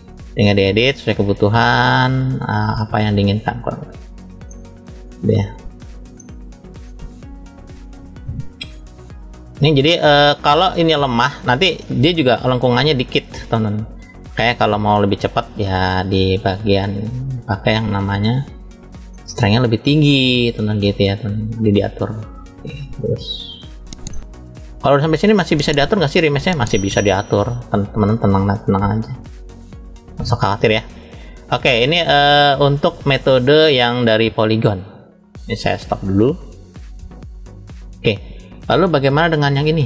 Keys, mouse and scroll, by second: 1.1 middle click, 2.2 click, 4.4 middle click, 5.6 click, 6.1 middle click, 7.4 click, 10.4 click, 11.7 middle click, 12.9 click, 14.3 click, 15.6 middle click, 16.8 click, 19.0-21.4 middle drag, 21.8 click, 24.0 middle click, 24.8 shift+middle click, 25.7 scroll up 1, 26.5 click, 26.5 scroll up 1, 30.8-31.2 scroll down 1, 31.6 middle click, 31.6-32.2 scroll down 3, 33.2 shift+middle click, 36.9-37.6 drag, 39.1 click, 39.5 click.